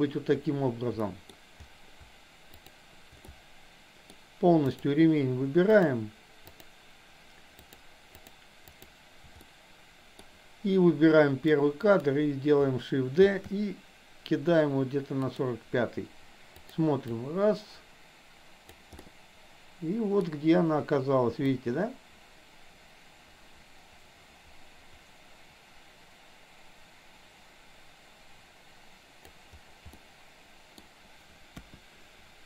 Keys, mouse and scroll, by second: 1.1 middle click, 2.6 shift+click, 3.2 shift+middle click, 4.7 shift+click, 5.7 shift+click, 6.5 shift+click, 7.5 shift+click, 8.7 shift+click, 9.5 middle click, 11.6 click, 13.2 shift+d, 16.6 click, 17.1 click, 19.0-20.1 middle drag, 21.6-29.4 drag, 29.9-30.7 middle drag, 31.5 KP_1.